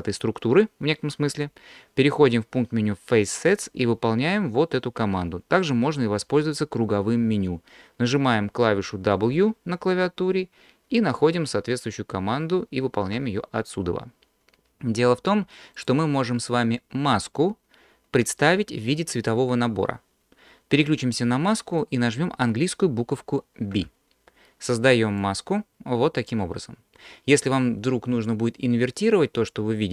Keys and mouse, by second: 3.3-5.4 drag, 9.3 w, 15.8 click, 23.7 b.